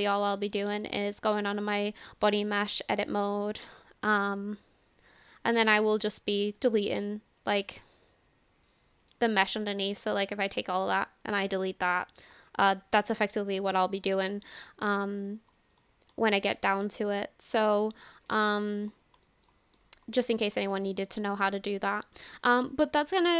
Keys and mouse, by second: 0.1 shift+middle click, 0.8 shift+middle click, 1.8 click, 2.7 Tab, 3.1 shift+middle click, 5.2 click, 6.0 click, 7.4 alt+click, 8.0 alt+click, 10.4 click, 11.9 Delete, 14.1 ctrl+z, 14.2 ctrl+z, 15.5 click, 18.1 click, 19.3 shift+click, 19.8 Tab, 20.3 shift+middle click, 20.9 click, 21.5 click, 22.0-22.4 shift+middle drag, 23.1 shift+middle click.